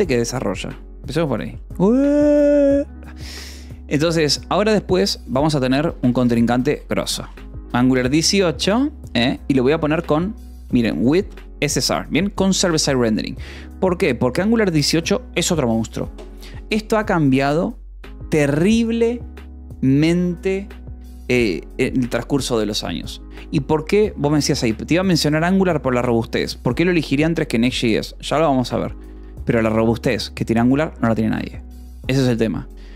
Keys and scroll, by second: 1.2 BackSpace, 1.7 space, 6.0 g, 6.4 u, 6.6 space, 7.1 8, 7.5 Escape, 9.0-11.5 typing, 11.7 Escape, 13.3 ctrl+s, 13.6 k, 14.6 Escape.